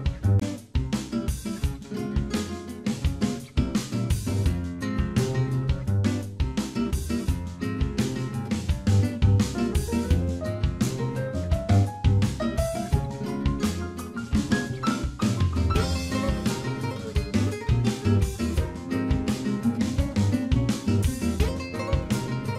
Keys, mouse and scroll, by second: 0.8 middle click, 1.8 shift+middle click, 2.2 middle click, 2.7 scroll up 1, 3.4 click, 3.4-3.7 scroll up 3, 4.3 KP_Decimal, 4.8 middle click, 5.2-5.6 scroll down 4, 5.5 shift+middle click, 7.0 shift+click, 7.3 scroll down 1, 8.3 ctrl+b, 8.3 scroll down 3, 10.3 click, 12.6 alt+m, 14.1 click, 14.5 shift+click, 15.4 shift+r, 15.9-16.4 scroll down 2, 16.2 shift+middle click, 16.7-17.2 scroll down 2, 17.1 shift+middle click, 17.5 middle click, 18.1 scroll up 1, 18.8 click, 18.8 scroll up 2, 19.1 shift+click, 20.1 ctrl+b, 21.7 middle click, 22.4 click.